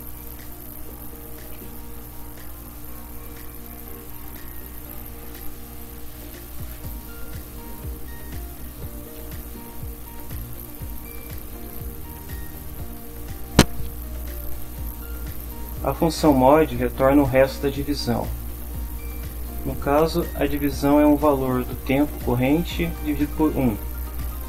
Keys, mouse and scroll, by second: 0.1 Return, 1.1-2.5 typing, 3.8 t, 5.4-7.2 typing, 9.1-13.0 typing, 12.6 End.